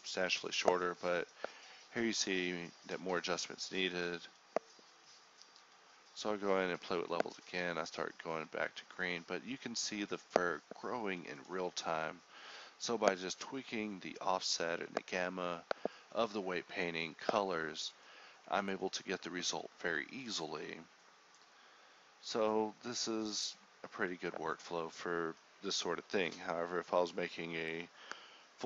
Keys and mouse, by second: 1.0-1.6 drag, 3.8 ctrl+s, 4.3 z, 4.4 z, 7.4 click, 8.7 click, 10.4-12.6 drag, 12.8-13.9 drag, 14.6 click, 15.9 click, 20.3 click, 21.8-23.8 drag, 23.9 click, 25.8-28.6 drag.